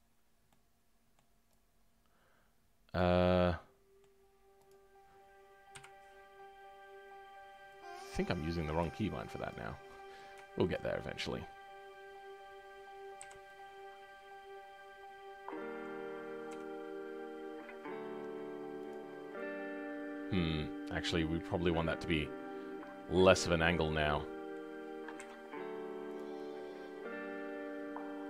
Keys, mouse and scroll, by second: 0.1-0.5 scroll up 1, 0.5-2.9 middle drag, 2.9 click, 3.2-4.6 middle drag, 4.6 click, 5.7 KP_Decimal, 6.3-7.4 scroll down 13, 7.9 click, 8.1-9.5 scroll down 3, 9.5 shift+click, 9.8-16.4 middle drag, 16.4 r, 19.0-19.3 scroll down 2, 19.3-28.2 middle drag.